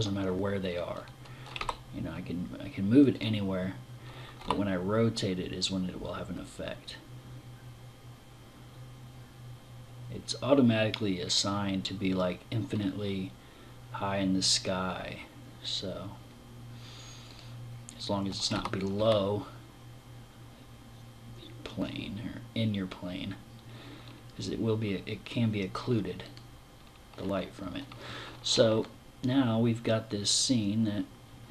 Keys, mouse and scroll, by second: 1.0 g, 2.6 click, 3.8 r, 5.0 r, 16.8 click, 18.0 g, 18.8 g, 25.8 click, 28.2 middle click, 28.8 middle click.